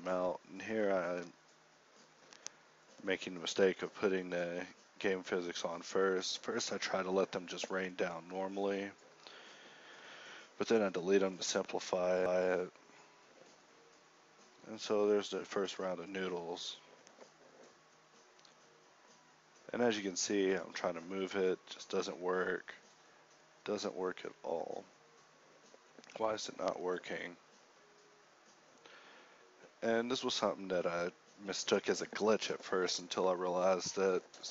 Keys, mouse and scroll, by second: 0.1 a, 2.1 alt+a, 2.5 Escape, 3.2 shift+Left, 3.8 alt+a, 4.5 alt+a, 6.6 Escape, 6.6-9.2 typing, 9.9 alt+a, 12.9 z, 14.1 Escape, 14.9 KP_7, 18.3 r, 21.3 r, 23.1 g, 23.8 g, 26.1 Tab, 27.3 g, 28.3 ctrl+z, 28.5 ctrl+z, 29.6 Tab, 30.1 g, 31.8 KP_1, 33.1-34.5 drag.